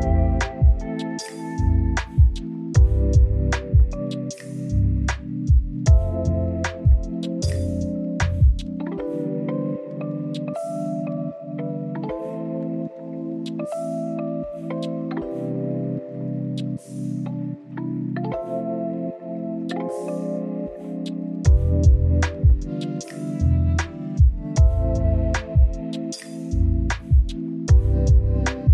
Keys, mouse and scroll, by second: 0.2 drag, 0.5 middle click, 0.6 click, 1.5 middle click, 2.4 x, 2.6 middle drag, 2.9 scroll up 1, 3.0 middle click, 3.9 ctrl+z, 4.0 middle click, 4.1 scroll up 1, 4.1 scroll down 2, 4.2-5.1 middle drag, 5.8 scroll down 1, 5.8 middle click, 6.4 `, 6.7 s, 8.1 click, 8.6 middle drag, 8.8 click, 8.9 middle drag, 9.2 click, 9.3 click, 9.4 x, 9.5 middle drag, 9.7 scroll up 2, 9.8-10.2 middle drag, 10.2 scroll down 1, 10.3-11.2 middle drag, 11.3 click, 11.4 middle click, 11.5 scroll down 2, 11.6 middle drag, 11.8 scroll up 1, 12.0 middle drag, 12.2-12.6 scroll down 2, 12.3 middle click, 12.6 click, 12.9 shift+a, 13.3 click, 13.7 click, 13.8 drag, 13.9 click, 14.0 click, 14.1 click, 14.2 scroll up 2, 14.3 shift+a, 17.4 click, 17.5 click, 17.6 click, 17.7-18.1 scroll up 2, 17.9 middle drag, 18.1 middle click, 18.7-19.0 drag, 19.9 click, 20.5-20.9 scroll down 1, 20.9-21.7 drag, 22.3 click, 22.4 scroll up 1, 22.6 middle click, 24.1-24.6 drag, 24.6-25.2 middle drag, 25.2 scroll down 4, 25.3 middle click, 26.5 click, 27.1 click, 27.4-27.8 scroll down 2, 27.8-28.5 drag, 28.5 middle click.